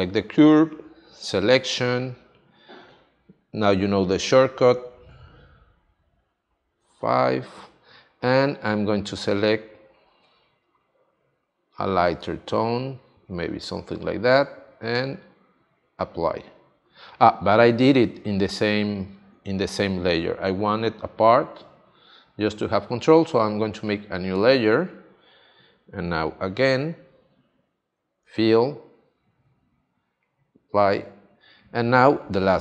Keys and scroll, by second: 6.7 shift+F5, 21.4 super+z, 27.7 shift+F5.